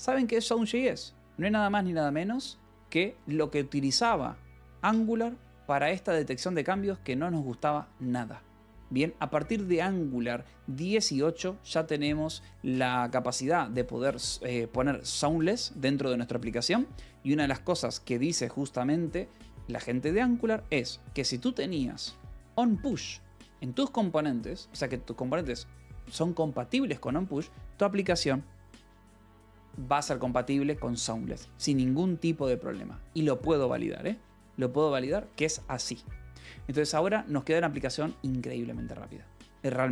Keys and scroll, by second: 2.8 ctrl+e, 3.8 ctrl+e, 5.2 c, 5.9 i, 6.8 ], 7.3 Escape, 8.3 ctrl+s, 14.0 ctrl+s, 20.2 /, 21.3-23.5 typing, 24.6 Escape, 35.3-37.4 typing.